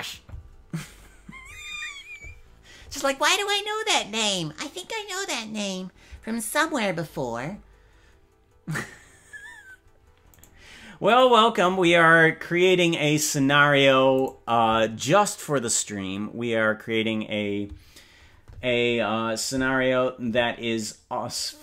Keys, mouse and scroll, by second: 10.4 right click, 11.2 right click, 14.2 right click.